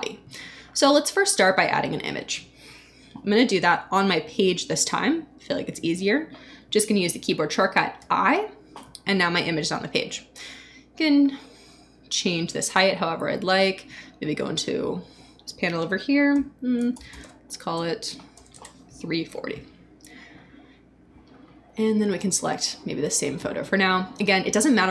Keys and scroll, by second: 7.9 i, 16.3-18.3 typing, 18.5 Return.